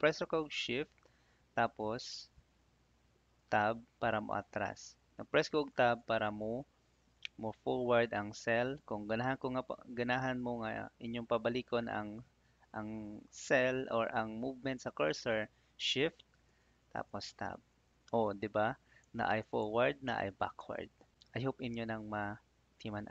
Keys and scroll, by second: 3.3 shift+Tab, 5.6 Tab, 16.4 shift+Tab, 19.0 Tab, 20.0 shift+Tab.